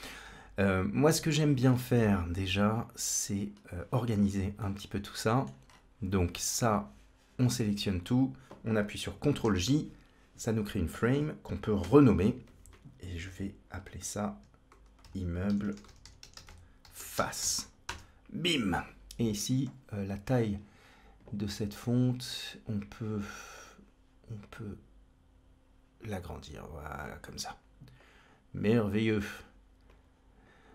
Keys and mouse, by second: 1.8 middle click, 4.4 middle click, 6.6-7.9 drag, 9.3 ctrl+j, 11.7 F2, 15.5 shift+m, 22.1 click, 23.4 click, 24.3-26.7 drag, 27.8-28.4 drag, 28.6 click, 29.7 click.